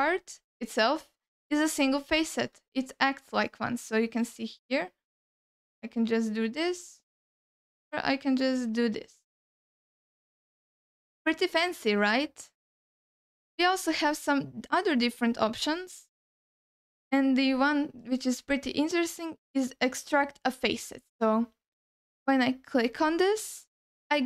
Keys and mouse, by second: 0.3 alt+middle click, 1.3 ctrl+alt+middle click, 2.0 alt+middle click, 3.7 ctrl+alt+w, 3.7 ctrl+alt+w, 4.1 ctrl+alt+w, 4.5 ctrl+alt+s, 4.8 ctrl+alt+s, 6.1 ctrl+alt+w, 6.2 ctrl+alt+w, 6.4 ctrl+alt+w, 7.4 alt+w, 9.2 ctrl+w, 9.5 ctrl+w, 9.9 ctrl+w, 10.5 alt+middle click, 14.0-24.2 drag.